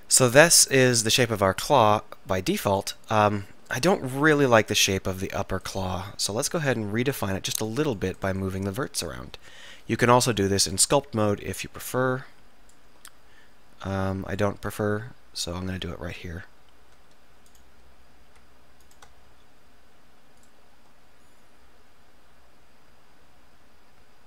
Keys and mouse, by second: 0.3-2.4 middle drag, 6.1-8.7 middle drag, 9.3 KP_1, 9.7 KP_3, 14.1 middle click, 15.0-16.6 middle drag, 17.6-19.6 middle drag, 19.4 s, 19.6-20.6 drag.